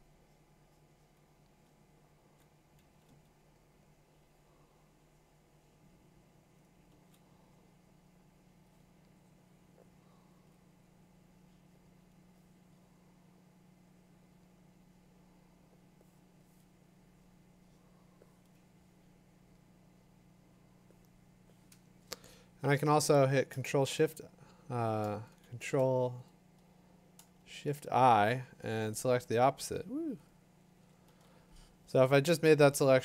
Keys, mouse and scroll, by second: 1.6-2.8 typing, 6.9 [, 10.5-16.4 drag, 22.9-25.4 drag, 23.7 shift+i, 25.4 shift+i, 27.4 shift+i, 31.1 ctrl+h.